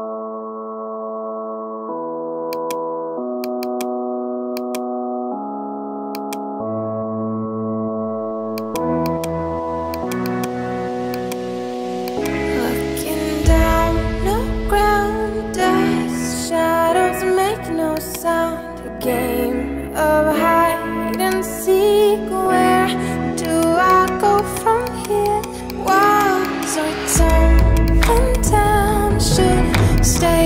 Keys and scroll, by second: 4.2 space, 16.3 p, 21.4 [, 29.3 [.